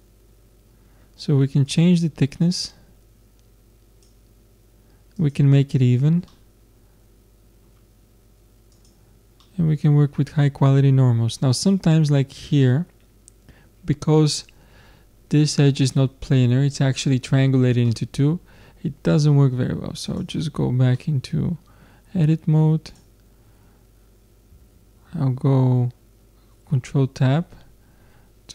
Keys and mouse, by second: 1.7-3.6 drag, 5.2-6.3 drag, 6.3-8.2 middle drag, 8.7 click, 9.5-11.2 middle drag, 12.6 middle click, 13.7 middle click, 17.9-19.3 middle drag, 20.1 click, 20.3 Tab, 21.0 middle click, 22.9-24.7 drag, 24.7 middle click, 24.8 ctrl+Tab.